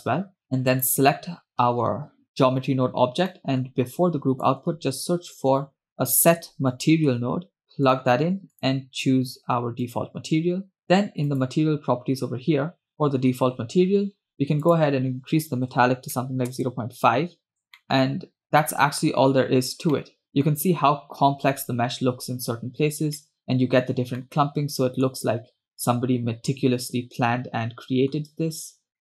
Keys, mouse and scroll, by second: 0.4 scroll up 4, 0.8 click, 3.1-3.7 scroll down 2, 3.4 middle click, 4.1-4.6 drag, 4.9 shift+a, 5.9 BackSpace, 8.7-10.4 drag, 11.5 click, 12.3-12.8 scroll down 1, 12.8-13.3 scroll down 4, 13.1 scroll up 5, 13.9-14.7 scroll down 2, 14.8-16.9 drag, 18.0 middle click, 19.4 scroll up 1, 20.2-20.8 middle drag, 22.4-22.7 scroll down 1, 23.2 scroll down 2, 23.3-23.7 middle drag, 24.3-25.6 middle drag, 25.5 scroll up 2, 25.9-28.5 middle drag, 28.9 scroll down 2.